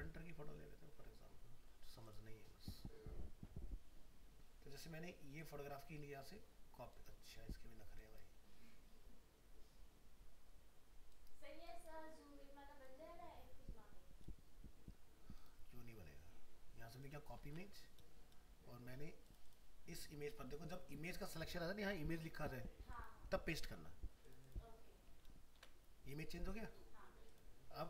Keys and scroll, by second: 17.5 alt+Tab, 25.6 ctrl+v.